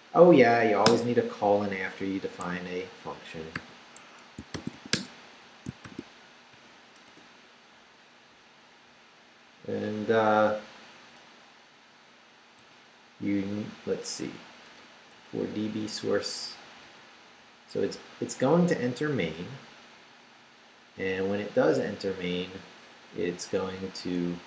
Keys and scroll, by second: 0.8 Return, 1.6 Up, 2.2 shift+Up, 2.4 shift+a, 4.0 shift+Escape, 4.3-5.8 typing, 5.7 shift+Return, 6.3 shift+Up, 7.0 Return, 12.6 Return, 13.8 Up, 15.1 Left, 17.0 Left, 17.8 Up, 18.6 Down, 19.4 Up, 19.9 Down, 20.4 Up, 20.9 Right, 22.2 Down, 22.8 Up, 23.4 Right.